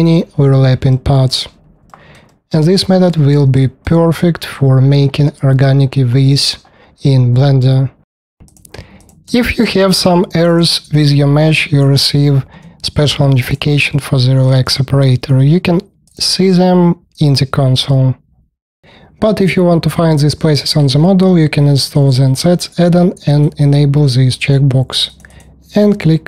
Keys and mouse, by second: 1.4-1.7 middle drag, 2.5-3.3 middle drag, 8.7 ctrl+click, 9.0 ctrl+click, 9.3 alt+click, 9.8 KP_5, 10.5 middle click, 10.7 alt+click, 11.0 alt+click, 11.3 alt+click, 11.7 alt+click, 11.8 click, 12.4 3, 13.7-14.7 drag, 15.5 click, 25.1 middle click, 25.2 click, 25.3-26.2 middle drag.